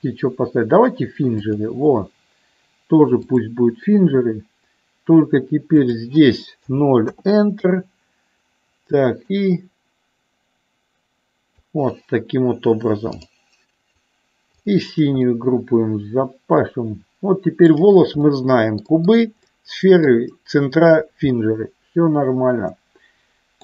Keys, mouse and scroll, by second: 3.4 click, 5.7-7.6 drag, 9.3-11.7 drag, 14.5 click, 15.2-17.7 middle drag, 18.3 middle click, 19.6 middle click, 21.5-23.6 middle drag.